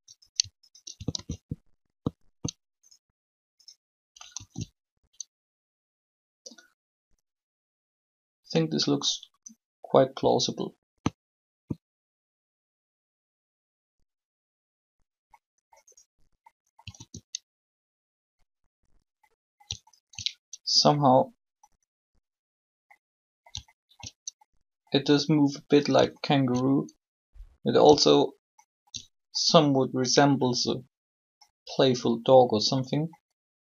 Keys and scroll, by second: 1.0 alt+shift+a, 4.2 alt+a, 16.9 alt+a.